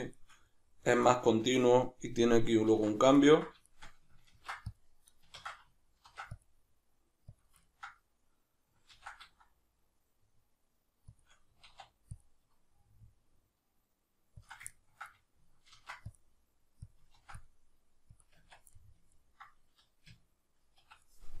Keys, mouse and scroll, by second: 2.7 alt+q, 4.3 ctrl+r, 5.2 right click, 5.4 ctrl+z, 6.1 ctrl+r, 7.4 click, 7.7-11.2 ctrl+middle drag, 8.9 ctrl+b, 11.2 shift+click, 11.7 alt+e, 14.5 click, 14.7-16.9 ctrl+middle drag, 15.7 ctrl+r, 16.9 click, 17.1 ctrl+r, 18.2 click, 18.4 Tab, 18.7-21.4 middle drag, 20.0 q, 20.8 Escape.